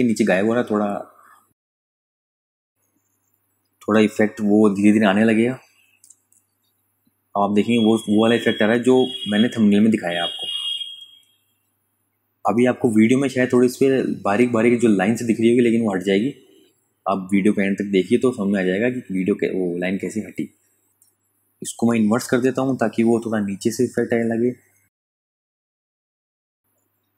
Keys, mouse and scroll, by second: 5.7 space, 6.0 click, 6.3 space, 7.0 ctrl+click, 7.4 space, 7.8 ctrl+click, 12.3 click, 12.4 space, 12.6 click, 13.2 ctrl+alt+click, 15.0 space, 15.2 click, 15.8 ctrl+click, 17.2 ctrl+click, 20.9 click.